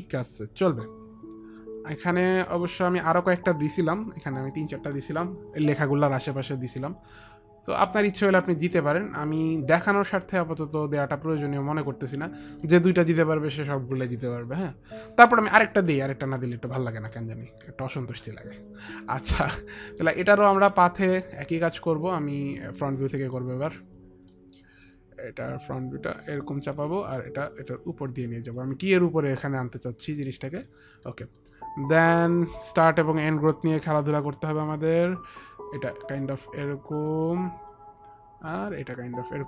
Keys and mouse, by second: 2.0 alt+click, 6.6 alt+click, 14.8 alt+click, 17.6 alt+click, 20.0 click, 22.8 middle click, 23.3 middle click, 23.3 click, 24.0 alt+middle click, 25.7 click, 27.7 click, 30.3 click, 31.1 middle click, 31.1 click, 31.6 middle click, 31.6 click, 34.3 click, 34.3 middle click, 34.5 middle click, 35.3 click, 38.6 click.